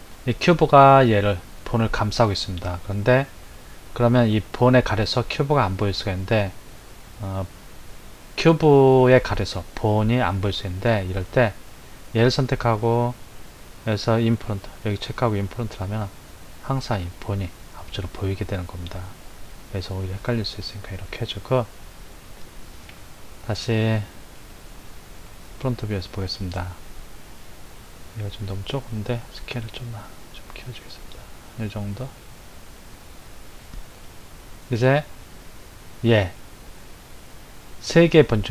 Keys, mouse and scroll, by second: 3.1-6.3 middle drag, 11.8 click, 15.8 click, 19.8 click, 23.7 KP_1, 27.9 click, 29.3 s, 36.3 click.